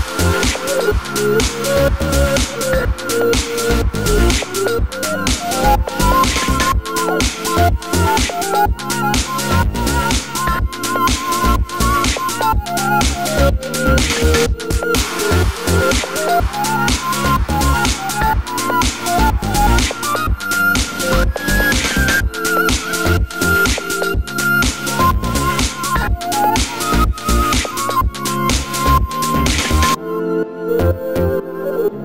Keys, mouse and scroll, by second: 0.8 click, 1.1 g, 2.8 click, 3.0 g, 5.9 click, 6.2 g, 7.4 click, 7.6 g, 8.7-9.6 middle drag, 9.6 click, 9.8-10.5 middle drag, 10.5-11.1 scroll down 2, 11.1 middle click, 14.2-16.1 scroll down 5, 15.3-16.7 shift+middle drag, 16.7 click, 17.2 click, 17.8 click, 19.3 click, 19.9-22.1 drag, 21.0 ctrl+z, 23.1-25.4 drag, 24.7 ctrl+z, 26.1 ctrl+s, 27.2-27.6 right drag, 27.4 scroll up 1, 27.6 shift+middle click, 28.0 click, 28.1 s, 29.1 click, 29.3 click, 29.6 s, 30.5 click, 30.8 r, 31.5 click, 31.7 s.